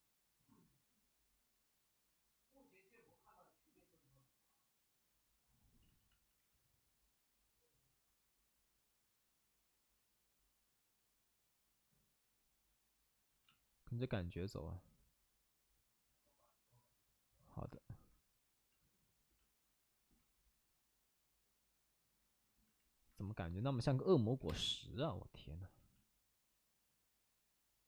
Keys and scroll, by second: 5.8 ctrl+z, 6.0 ctrl+z, 6.2 ctrl+z, 13.4 ctrl+z, 24.3 7, 24.4 space, 25.7 ctrl+z.